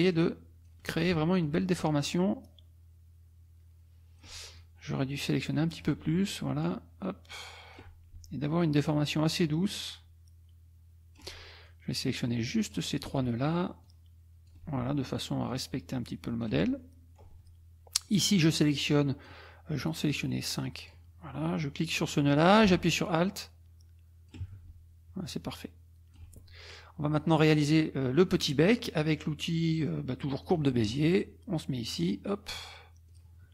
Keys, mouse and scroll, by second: 2.4-4.4 alt+drag, 4.6-6.0 alt+drag, 6.6-7.9 alt+drag, 8.9-11.4 alt+drag, 11.7-12.9 alt+drag, 13.8 alt+click, 15.5 alt+click, 16.8 alt+middle click, 18.1-19.4 drag, 19.8-21.1 drag, 21.9-24.5 drag, 25.3 alt+click, 30.4 click, 31.9 click, 33.1 click.